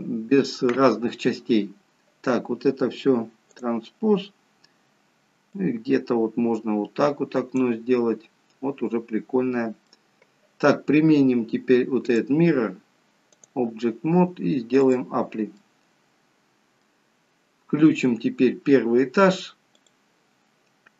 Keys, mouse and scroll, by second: 3.5 click, 6.2 click, 7.9 middle click, 12.0 click, 14.9 click, 15.5 middle click, 17.1-17.8 scroll down 2, 17.8 scroll down 1, 17.9-18.5 scroll up 1, 19.7 click, 19.7-20.1 scroll up 5.